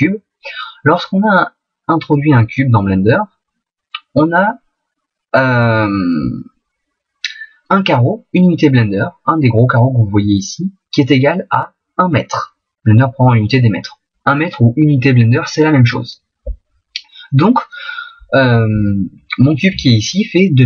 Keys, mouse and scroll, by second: 0.2 shift+a, 1.2 middle click, 7.8 middle click, 16.9 middle click.